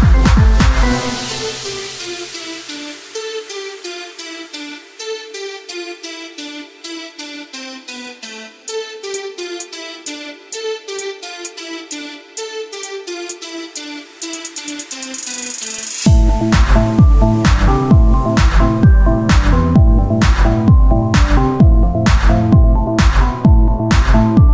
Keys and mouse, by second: 3.8 s, 5.6 KP_1, 6.2 Tab, 6.9 ctrl+r, 10.0 ctrl+r, 11.8 ctrl+Tab, 13.8 ctrl+Tab, 13.8 z, 14.2 click, 17.0-18.0 drag, 18.0 i, 18.7 click, 19.0 i, 19.6 i, 20.0 i, 21.0 i, 23.1 x, 23.4 click.